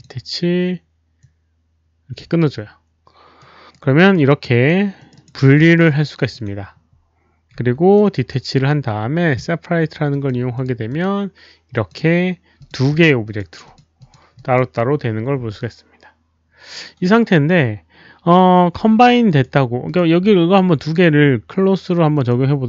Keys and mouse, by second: 1.1 alt+click, 3.3 right click, 4.1 right click, 4.9 click, 5.4 w, 5.5 alt+middle click, 7.7-8.4 typing, 7.9 right click, 7.9 middle click, 7.9 click, 8.5 click, 10.1 click, 10.4-11.1 typing, 10.5 click, 10.6 right click, 10.6 middle click, 10.8 click, 11.7 click, 12.4-13.1 typing, 12.5 click, 12.6 right click, 12.6 middle click, 12.8 click, 13.2 click, 13.6 click, 13.9 click, 14.3 click, 19.2 click, 19.8 click, 20.2 click, 22.1 click.